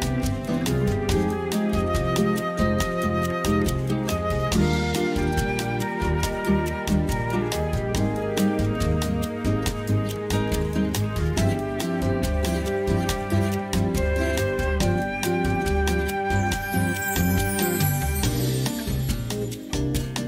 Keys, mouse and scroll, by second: 0.0 g, 1.1 click, 2.7 click, 3.9 click, 5.1 click, 5.9 g, 7.8 click, 9.1 click, 10.5 click, 12.5 shift+middle click, 13.2 click, 14.0-15.1 drag, 16.4 KP_3, 17.4 click, 19.1-20.2 drag.